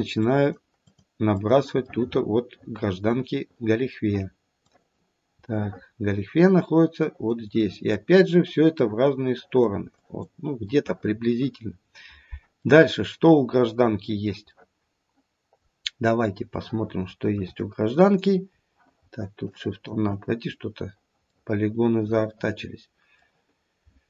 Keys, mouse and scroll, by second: 0.2 click, 0.8 click, 1.3 click, 1.8 middle click, 2.0 middle click, 2.3 middle click, 3.3 middle click, 3.8 middle click, 4.5 click, 5.5 middle click, 7.0 click, 7.5 click, 8.1 click, 8.8 click, 9.3 click, 9.9 click, 10.6 middle click, 11.0 middle click, 11.2 middle click, 11.4 middle click, 11.6 middle click, 12.7 middle click, 12.9 middle click, 14.5 middle click, 15.7-16.4 scroll up 1, 16.4 scroll up 1, 16.6-17.4 shift+middle click, 17.8 middle click, 18.0 middle click, 18.5 scroll down 2, 19.5 shift+click, 20.5-21.0 scroll up 2, 22.3 middle click.